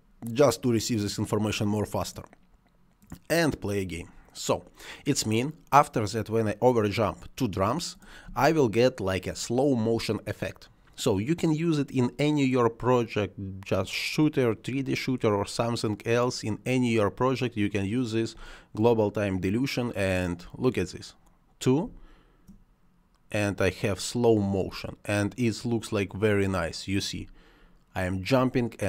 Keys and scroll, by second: 8.2 space, 18.3 space, 21.7 space, 27.1 space.